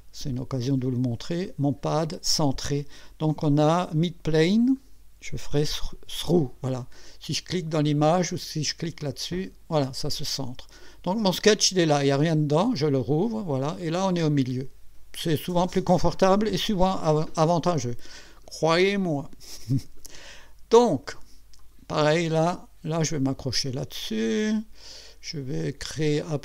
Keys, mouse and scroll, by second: 0.3 click, 1.4 click, 4.3 click, 5.7 click, 9.0 click, 12.3 click, 13.4 scroll up 1, 13.8-14.5 right drag, 21.6 click, 24.3 click, 26.1 click.